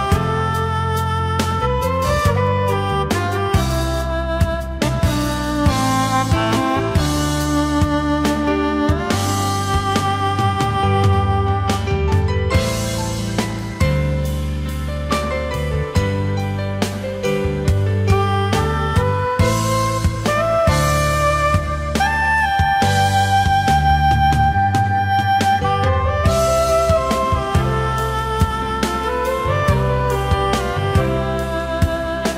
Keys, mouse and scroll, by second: 3.1 Delete, 5.0 alt+scroll up 1, 5.6 alt+click, 7.9 ctrl+z, 8.3 alt+scroll down 1, 8.5 space, 10.3 space, 15.9 alt+scroll up 1, 19.5 space, 20.4-20.9 alt+scroll up 1, 27.6 shift+click, 29.5 alt+scroll down 1.